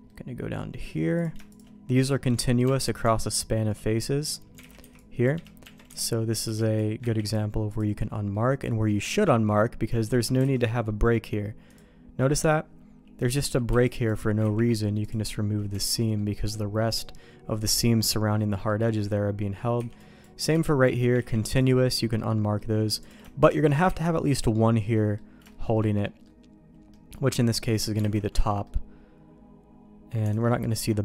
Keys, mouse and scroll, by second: 0.0 middle click, 1.1 click, 1.5 shift+click, 2.1 shift+middle click, 2.6 Tab, 4.6 alt+a, 4.8 c, 5.6 Tab, 5.8 alt+a, 6.4 b, 7.0 ctrl+e, 8.3 middle click, 9.0 shift+middle click, 9.9 shift+middle click, 10.5 alt+a, 11.6 click, 12.3 click, 13.6 b, 14.6 ctrl+e, 15.7 alt+a, 15.9 middle click, 16.3 middle click, 17.5 middle click, 18.3 middle click, 19.3 middle click, 19.7 b, 20.5 b, 21.4 ctrl+e, 22.1 middle click, 23.0 click, 23.4 shift+click, 23.8 ctrl+e, 24.9 middle click, 25.4 shift+middle click, 26.0 middle click, 26.9 middle click, 28.1 alt+a, 28.3 Tab, 28.6-30.1 middle drag, 30.3 alt+a, 30.6 middle click.